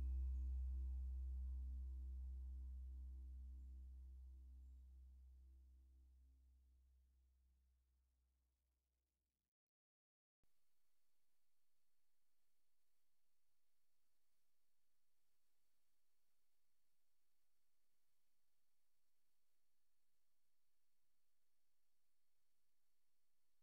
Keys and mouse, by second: 1.3 ctrl+s, 3.5 t, 5.8 -, 6.7-8.2 drag, 8.2 ctrl+s, 12.3 click, 14.8-23.6 drag.